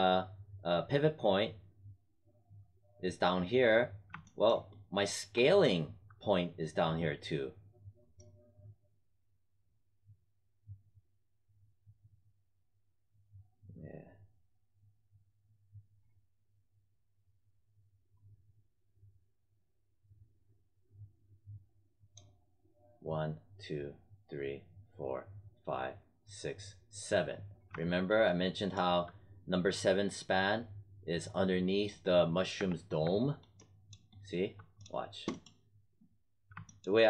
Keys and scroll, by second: 31.8 space.